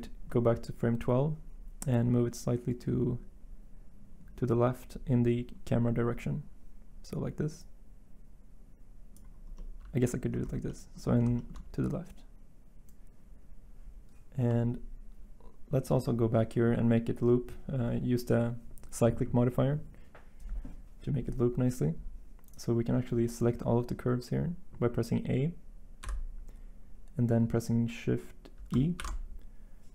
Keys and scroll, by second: 26.0 a, 28.9 e.